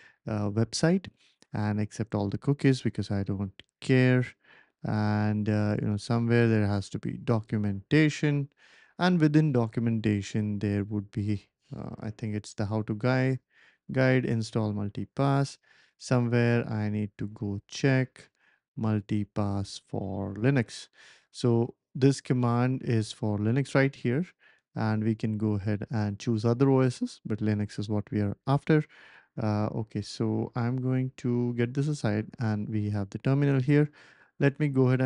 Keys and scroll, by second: 31.4 typing, 34.2 ctrl+shift+v.